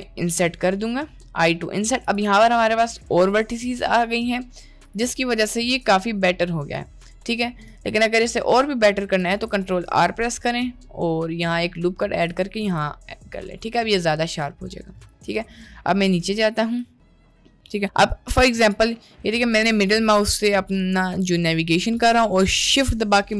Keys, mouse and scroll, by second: 4.9 click, 5.2 middle click, 6.8 click, 9.2 ctrl+r, 12.7 Tab, 14.3 middle click, 15.6-16.0 shift+middle drag, 16.4 shift+middle drag, 17.0-17.3 middle drag, 17.4-17.8 shift+middle drag, 18.0-18.4 middle drag, 18.8-22.8 middle drag, 23.2-23.3 shift+middle drag.